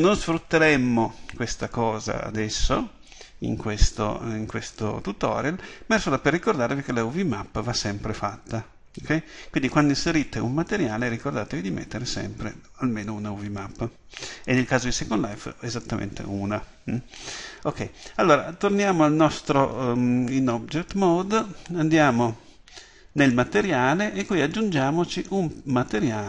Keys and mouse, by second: 20.4 Tab.